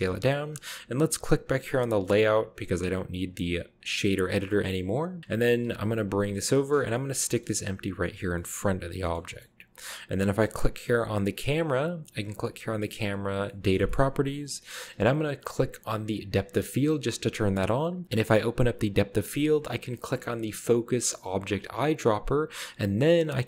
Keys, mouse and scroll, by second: 0.0-0.5 typing, 2.6 click, 5.8 shift+g, 6.8 drag, 6.9-7.7 middle drag, 7.5 g, 7.8-8.3 middle drag, 8.4-10.0 middle drag, 9.2-10.1 shift+scroll up 1, 11.4-11.8 right drag, 12.9 click, 13.3-14.1 scroll down 1, 13.5-14.6 middle drag, 14.1-14.9 shift+scroll up 1, 16.4 click, 16.9-17.8 scroll up 1, 21.6 click.